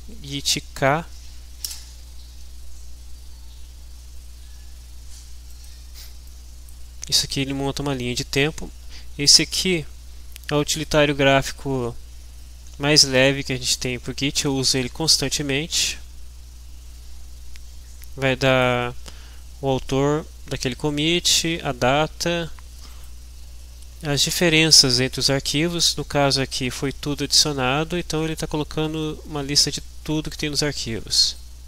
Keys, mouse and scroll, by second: 1.7 Return, 5.5-6.8 drag, 18.4 click, 22.9 click, 26.5-29.6 scroll down 3, 31.2 click.